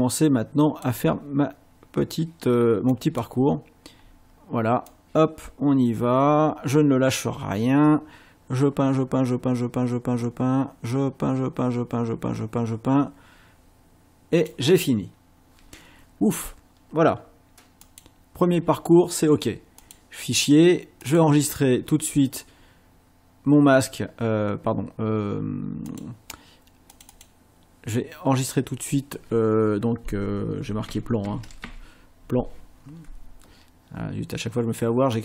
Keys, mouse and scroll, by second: 2.9 click, 4.9-14.6 drag, 17.9 click, 19.8 click, 21.1 click, 25.9 click, 26.9 click, 30.4-32.1 typing, 35.1 click.